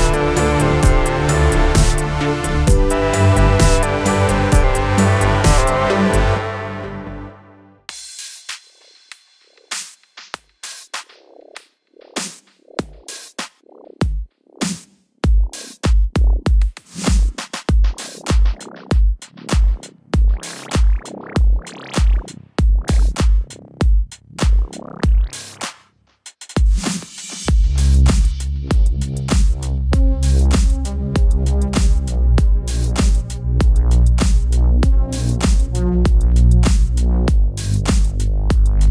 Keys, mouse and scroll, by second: 1.4 scroll up 2, 2.5 3, 2.8 click, 3.4 middle click, 4.2 click, 4.6 middle click, 4.9-5.2 scroll up 2, 5.2-8.0 shift+middle drag, 8.0 click, 8.6 shift+click, 9.5-10.2 drag, 10.2 scroll down 2, 10.4-11.4 middle drag, 11.4 click, 12.6-13.4 drag, 13.4 scroll down 2, 13.9 middle click, 14.7 scroll down 2, 14.9 middle click, 15.6 scroll down 2, 15.9 middle click, 16.5 alt+a, 17.0 middle click, 17.3 /, 17.7 middle click, 18.2 Tab, 18.4 click, 19.4-19.7 middle drag, 19.7 Tab, 20.1 shift+middle click, 20.6 scroll down 2, 20.9 middle click, 21.2 alt+a, 22.9-23.4 drag, 23.4-25.0 middle drag, 25.0-26.3 drag, 26.3 middle click, 27.0 /, 27.5 middle click, 27.9 Tab, 28.3-29.1 middle drag, 29.1 click, 30.4 scroll down 2, 30.6-31.0 middle drag, 31.0 Tab, 31.4 shift+middle click, 32.0 alt+a, 32.3-33.6 middle drag, 33.6-34.0 drag, 34.0-37.0 middle drag, 37.2-38.4 drag, 38.4-38.9 scroll up 1.